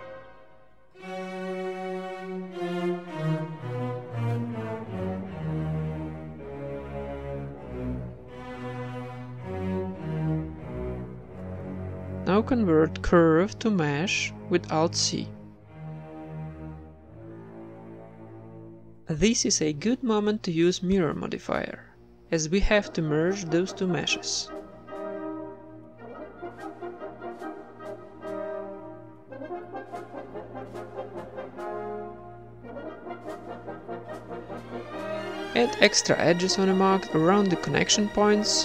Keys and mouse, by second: 0.1 Tab, 0.7 KP_1, 1.4 right click, 3.8 click, 3.9 middle click, 4.4 click, 4.4-5.4 right drag, 5.0-7.8 typing, 5.4 Tab, 5.9-6.9 right drag, 7.0 right click, 9.5 shift+z, 10.0 middle click, 10.3 Tab, 12.1 alt+v, 12.5 alt+c, 14.8-16.0 middle drag, 15.3 s, 16.7 Tab, 16.9 middle click, 19.6 middle click, 20.0 ctrl+r, 20.3 click, 20.6 Tab, 20.9 Tab, 21.0 ctrl+r, 21.6 ctrl+Tab, 21.6 z, 21.6 a, 21.7 b, 22.6 x, 23.4 Tab, 23.8-25.1 drag, 25.2-26.2 drag, 26.3 click, 26.8-27.9 middle drag, 27.0-29.9 typing, 27.5 click, 27.6 right click, 28.3 Tab, 29.0-30.2 drag, 30.5 Tab, 31.3-33.3 right drag, 31.8 z, 32.7 ctrl+l, 33.6 a, 33.6 middle click, 33.9-34.9 right drag, 34.9 middle click, 35.1 click, 35.2 right click, 35.3 ctrl+s, 35.6 middle click, 35.8 Tab, 36.3 ctrl+Tab, 36.7 right click, 37.2 w, 37.8 click, 37.8 right click, 38.1 middle click, 38.3 w.